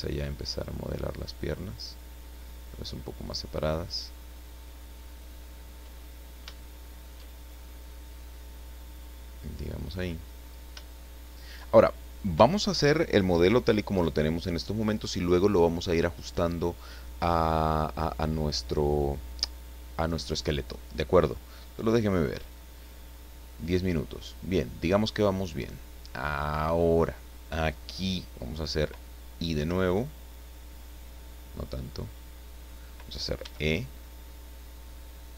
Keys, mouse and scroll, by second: 0.5 click, 1.4-5.4 drag, 6.0 middle click, 8.7 click, 9.8 scroll down 2, 10.1-10.7 scroll up 2, 10.9 shift+middle click, 11.7 shift+scroll down 2, 21.9 click, 22.8 click, 23.5 scroll up 2, 24.3 scroll down 2, 24.9-26.2 middle drag, 26.3-26.7 scroll up 2, 29.5 i, 32.6 click, 33.4 e.